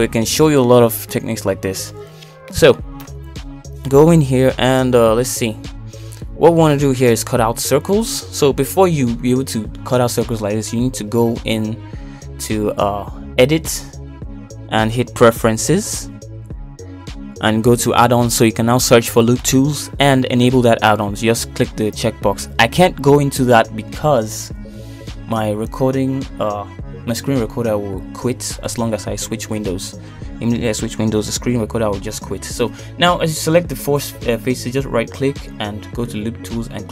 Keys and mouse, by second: 0.0 middle click, 0.7 Tab, 1.2 shift+middle click, 1.7 middle click, 2.2 shift+middle click, 4.4 middle click, 5.7 Tab, 6.9 shift+middle click, 7.5 KP_1, 8.2 shift+click, 12.1 shift+click, 12.4 shift+click, 13.2 ctrl+z, 30.1 shift+middle click.